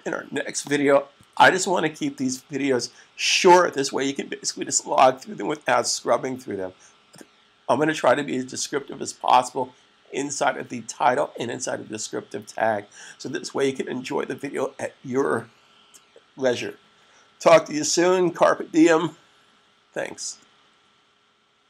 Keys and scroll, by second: 1.0 super+s.